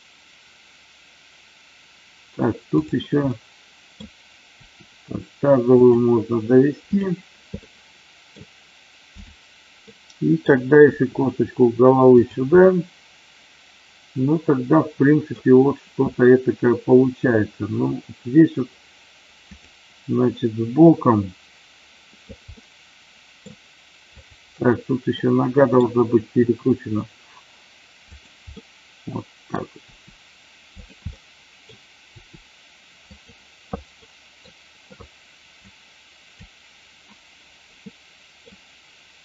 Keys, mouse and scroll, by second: 2.9 click, 3.2 middle click, 4.6 r, 5.6 click, 7.0 click, 7.6 middle click, 9.8 middle click, 10.7 r, 12.1 click, 12.6-15.3 middle drag, 19.5 click, 22.5-23.3 middle drag, 24.2 click, 25.2-25.7 middle drag, 26.3 r, 28.0 click, 28.5 middle click, 29.7 r, 30.7 click, 30.9-31.7 middle drag, 32.1 r, 33.1 click, 33.9-34.3 middle drag, 35.4 click, 37.8-38.4 middle drag.